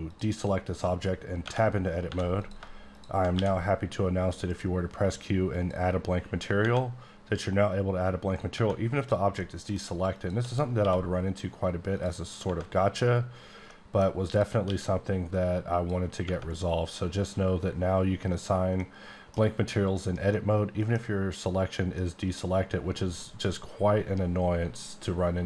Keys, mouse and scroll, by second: 1.4 Tab, 2.1 3, 2.4 click, 2.9 click, 3.4 q, 5.5 click, 8.5 Tab, 9.0 click, 9.3 middle click, 10.1 shift+click, 10.8 q, 11.9 click, 12.4 Tab, 13.5 Tab, 13.7 middle click, 14.3 click, 14.6 q, 15.7 click, 16.2 Tab, 18.8 middle click, 20.3 middle click, 21.9 middle click.